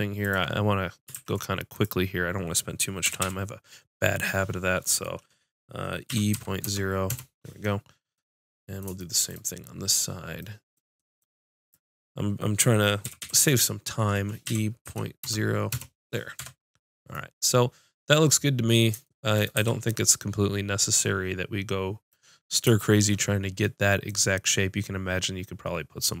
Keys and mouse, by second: 1.1 ctrl+z, 1.7-4.3 drag, 3.0 g, 11.6-13.0 drag, 13.0 g, 15.3-17.0 middle drag, 16.4 Tab, 19.5 a, 25.5 click.